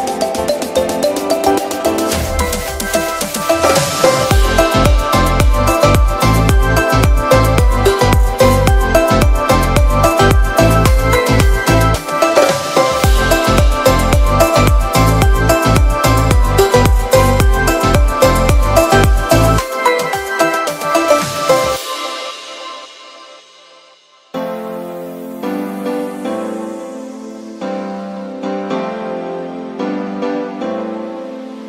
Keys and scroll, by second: 0.0 ], 15.7 v, 28.8 super+-, 29.1 super+=.